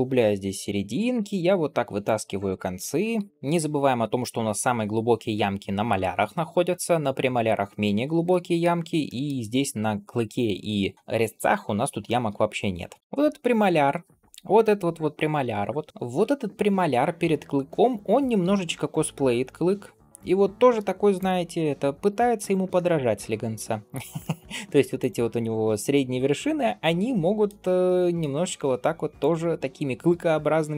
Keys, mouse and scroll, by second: 0.1 g, 0.8 click, 1.2 shift+click, 1.9 shift+click, 2.3 shift+click, 3.0 g, 8.1 shift+middle click, 8.9 middle click, 9.3-9.8 scroll down 2, 9.8 scroll up 1, 11.9 shift+middle click, 12.3-12.9 scroll up 2, 13.0 middle click, 13.0 scroll down 2, 13.2 scroll up 2, 18.3 g, 21.4 middle click, 22.2 click, 22.6 middle click, 23.0 g, 24.1 middle click, 24.8 click, 25.3-27.3 middle drag, 27.7 middle click, 28.4 g, 29.4 click, 29.9 g.